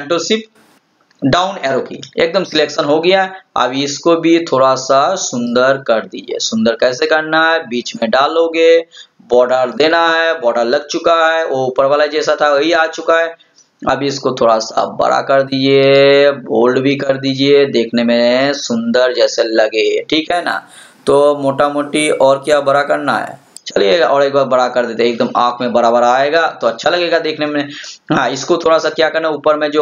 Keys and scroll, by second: 1.6 ctrl+shift+Down.